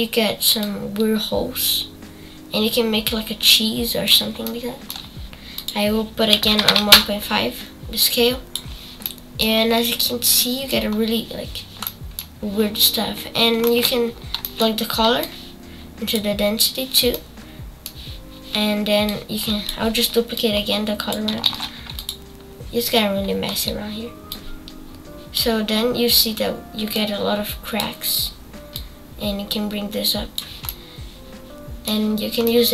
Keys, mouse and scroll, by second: 4.5-7.1 shift+middle drag, 7.1-9.0 drag, 9.0 middle click, 9.5 scroll down 4, 9.8-10.9 middle drag, 10.9-11.8 scroll up 1, 11.8 middle click, 12.4-13.1 scroll up 2, 16.3 click, 17.1-19.0 middle drag, 19.0 click, 20.3-21.5 drag, 21.5 shift+d, 24.5-30.7 drag, 30.7-32.1 middle drag, 32.1-32.4 scroll up 3, 32.2-32.7 middle drag.